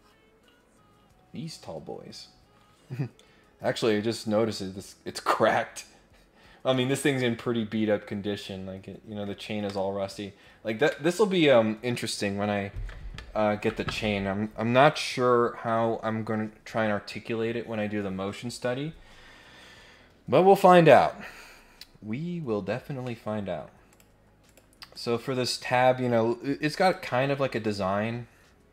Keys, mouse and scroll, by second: 21.7-22.0 scroll down 1, 22.3-22.8 scroll up 2, 23.0 middle click, 23.9 click, 24.4 click, 25.5 scroll up 2, 26.8 click.